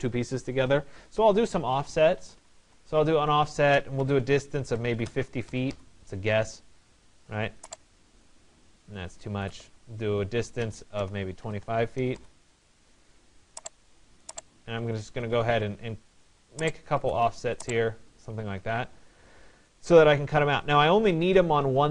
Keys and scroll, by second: 18.0 Escape.